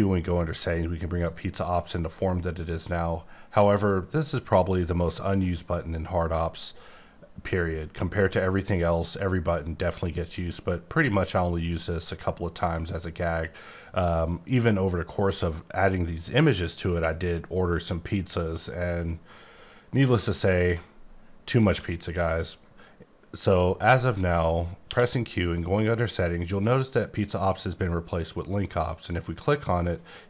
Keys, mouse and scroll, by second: 1.2 click, 2.7-3.7 scroll up 5, 3.7-4.7 scroll down 5, 4.7-5.4 scroll up 4, 5.4-6.7 scroll down 6, 6.7-7.9 scroll up 6, 7.9-8.6 scroll down 4, 8.6-9.6 scroll up 5, 9.6-10.7 scroll down 7, 10.7-12.7 scroll up 4, 12.7 click, 15.1-15.5 scroll down 7, 15.7-16.1 scroll up 8, 16.1-16.4 scroll down 10, 16.4-16.7 scroll up 6, 16.7-17.1 scroll down 6, 17.1-17.6 scroll up 5, 17.6-18.1 scroll down 4, 18.1-18.7 scroll up 3, 18.7-19.3 scroll down 3, 19.3-20.5 scroll up 5, 20.5 right click, 24.9 q, 29.0 click.